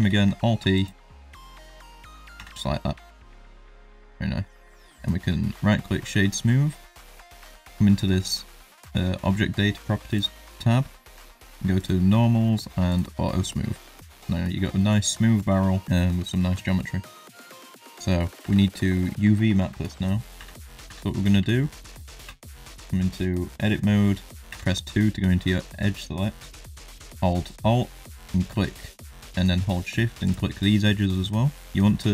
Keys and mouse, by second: 0.0 alt+e, 2.3 Tab, 2.7 middle click, 3.3-4.3 middle drag, 4.7 right click, 5.5 shift+middle drag, 10.1 click, 12.9-13.5 drag, 13.5 middle drag, 13.8 click, 14.3-14.7 middle drag, 14.9 shift+middle drag, 15.3 middle drag, 15.8-16.4 middle drag, 16.5 shift+middle drag, 16.8 middle drag, 17.7 Tab, 17.9 middle click, 18.4 Tab, 18.8 middle click, 19.3 shift+middle click, 19.7 middle click, 20.4 Tab, 20.6 shift+middle click, 20.8 2, 21.0 middle click, 21.5 shift+middle click, 21.8 middle click, 22.2 2, 22.7 middle click, 23.3 shift+middle click, 24.4 2.